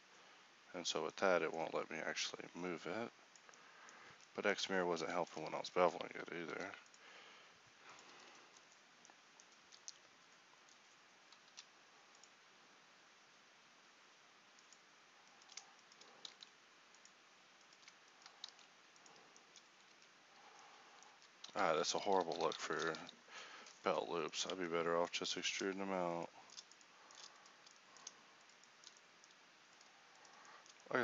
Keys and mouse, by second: 1.1-4.1 middle drag, 4.1 Tab, 5.3 KP_1, 5.6 Tab, 6.5 ctrl+r, 8.1 Tab, 9.7 Tab, 11.5 ctrl+r, 16.3 alt+s, 18.5 alt+s, 19.5 middle click, 19.9 Tab, 21.1 Tab, 21.5-22.5 ctrl+z, 24.6 ctrl+Tab, 27.7-29.1 middle drag, 30.7 middle click.